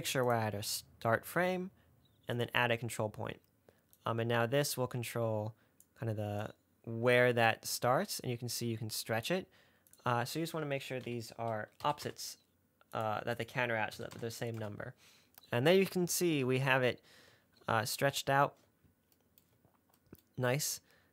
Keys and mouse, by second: 0.6 click, 2.6 click, 4.3-6.2 drag, 6.8-9.6 drag, 10.3-13.4 drag, 13.6-14.9 drag.